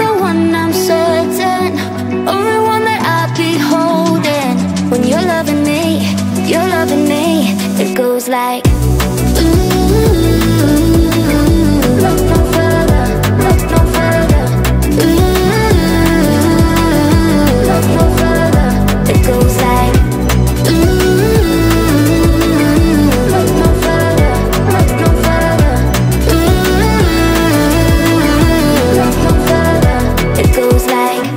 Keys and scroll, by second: 6.9 Right, 18.3 space.